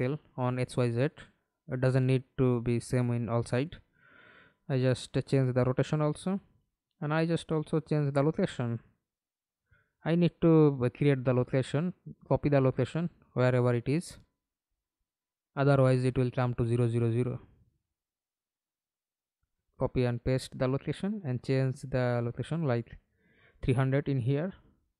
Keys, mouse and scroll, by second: 2.3-4.8 typing, 9.3-10.5 typing, 10.5 Return, 12.1 right click, 15.7 right click, 18.8 right click, 22.8-24.0 typing.